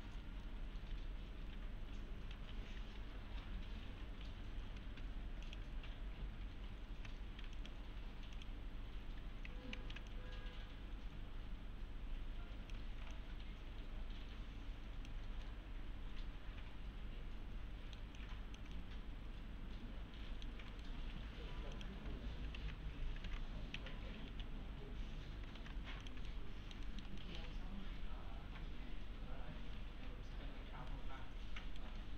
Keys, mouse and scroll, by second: 0.8 F3, 2.3 F4, 3.0 F3, 5.5 click, 7.6 click, 8.7-9.6 scroll down 1, 9.8 z, 10.1-12.9 click, 13.1-15.3 alt+click, 15.5-20.6 middle click, 18.2 alt+click, 18.7 middle click, 20.7 right click, 21.7 click, 21.8 click, 22.6 alt+w, 23.3 alt+w, 23.8 f, 24.3 z, 24.7-25.5 scroll down 1, 25.6 shift+f, 26.0 click, 26.3 alt+middle click, 26.6-27.2 alt+middle click, 27.2 alt+middle click, 30.9-31.8 right click, 31.8 right click, 32.0 scroll down 1.